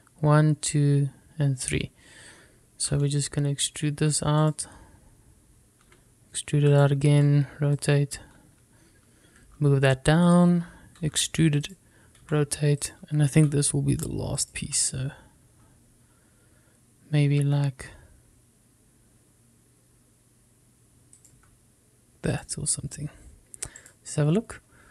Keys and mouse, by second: 4.0 e, 5.5 click, 6.9 e, 7.8 click, 8.2 r, 8.9 click, 10.5 g, 11.4 click, 12.1 e, 12.7 click, 13.4 r, 13.9 click, 14.5 g, 15.5 click, 15.8 e, 22.3 click, 22.5 s, 23.5 click.